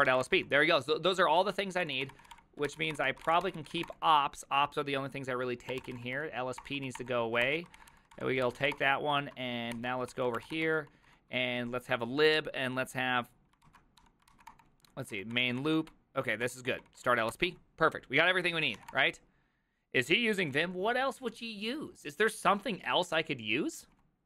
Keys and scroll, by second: 0.0-4.3 typing, 5.7-11.6 typing, 7.5 ctrl+c, 9.8 ctrl+n, 10.1 ctrl+c, 13.7 ctrl+c, 14.0-15.0 typing, 15.2 ctrl+d, 15.4 ctrl+d, 15.7 ctrl+d, 17.3 ctrl+d, 17.3 ctrl+c, 18.6-19.4 typing.